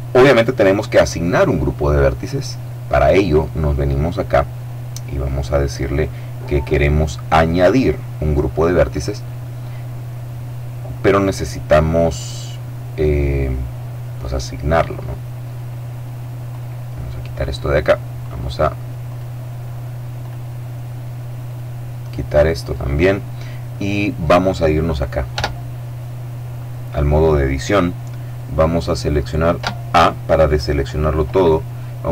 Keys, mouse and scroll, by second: 2.1 click, 7.5 click, 16.2 click, 17.9 click, 18.7 click, 19.9 click, 21.1 click, 22.3 click, 25.0 Tab, 29.3 a.